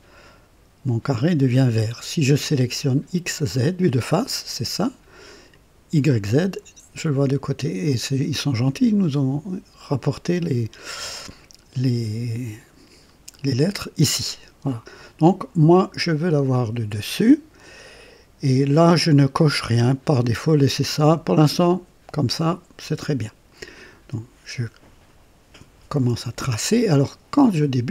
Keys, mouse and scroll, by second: 3.2 click, 5.5 click, 16.1 click, 23.7 click, 26.0 scroll up 1, 27.6 right click.